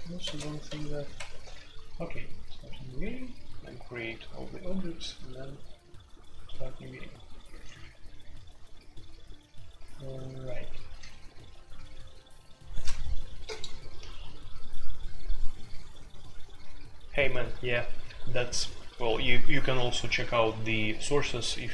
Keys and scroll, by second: 0.0-1.1 typing, 7.5 typing, 10.8 typing.